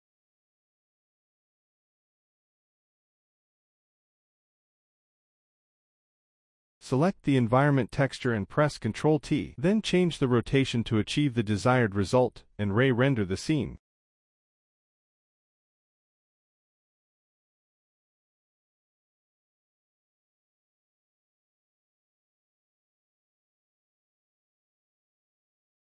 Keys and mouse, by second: 1.3-2.6 drag, 3.1-3.5 middle drag, 3.7-5.5 middle drag, 5.9 middle click, 6.5 KP_0, 7.9 middle click, 9.3 ctrl+t, 9.3 middle click, 10.3-14.0 drag, 15.4-18.4 drag, 19.3-20.8 drag, 22.1 click, 23.0-25.8 drag.